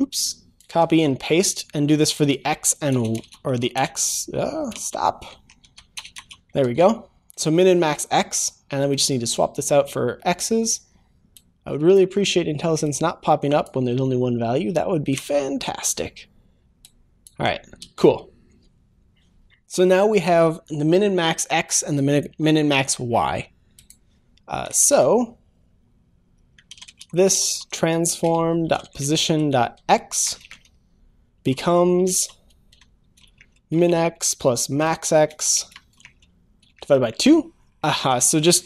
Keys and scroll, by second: 0.8 ctrl+c, 1.0 ctrl+v, 1.2 ctrl+v, 6.6 Escape, 6.6 ctrl+s, 15.3 Delete, 17.9 ctrl+s, 28.3 Return, 29.0 Return.